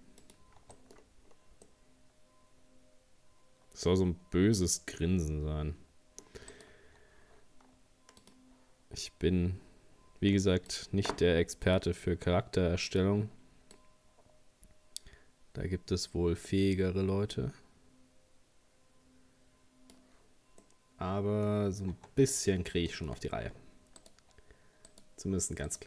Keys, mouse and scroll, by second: 0.6 Tab, 0.7 middle click, 1.0-1.7 scroll down 4, 1.7-4.7 middle drag, 6.5 right click, 8.3-15.9 drag, 20.6-21.6 middle drag, 21.6-22.0 scroll up 1, 22.0 Tab, 22.3 middle click, 23.2-23.9 scroll up 3, 24.0 right click, 24.9 shift+right click, 25.7 shift+right click.